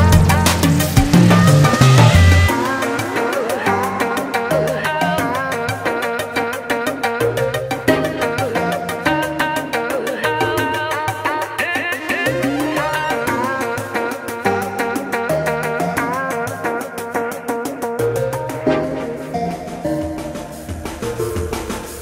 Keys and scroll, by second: 2.7-4.3 typing, 19.5 ctrl+space.